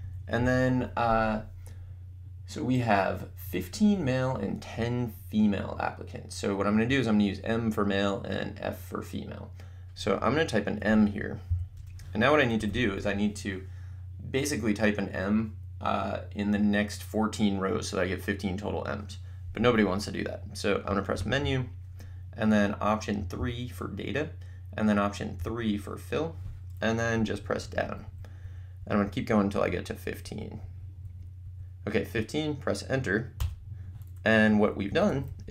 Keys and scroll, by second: 0.0 Down, 11.5 m, 11.8 Return, 12.6 Up, 21.4 Menu, 23.6 3, 27.2 Down, 33.4 Return, 34.5 Up, 34.9 Down.